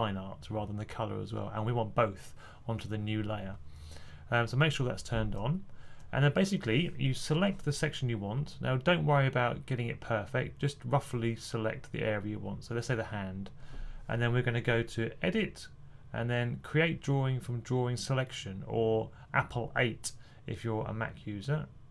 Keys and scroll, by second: 6.9 typing.